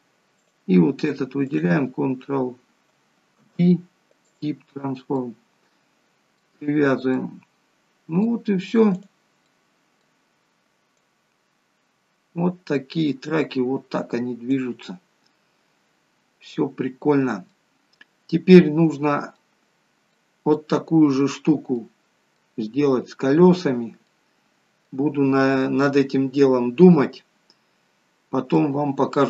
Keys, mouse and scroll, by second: 0.4 click, 1.5 shift+click, 3.4 ctrl+p, 5.2 middle click, 6.8-7.2 scroll down 2, 7.2 middle click, 9.0 click, 9.5 middle click, 11.2 click, 15.0 middle click, 19.7-20.1 scroll up 2, 20.2 middle click, 21.9 middle click, 28.1-28.8 scroll down 2, 28.6 middle click.